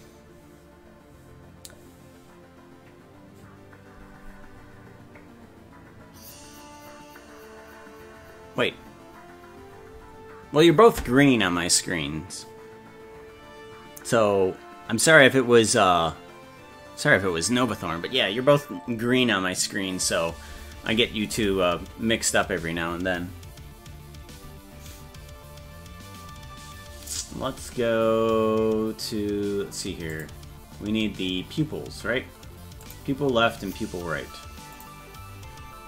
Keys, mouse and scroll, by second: 30.1 click, 30.4-31.8 scroll down 9, 32.8 click, 34.7 click.